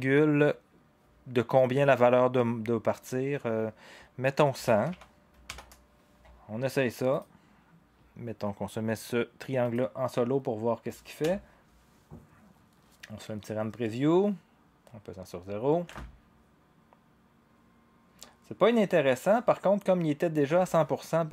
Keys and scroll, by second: 4.3-5.5 typing, 11.2 0, 15.8 0, 20.5 0.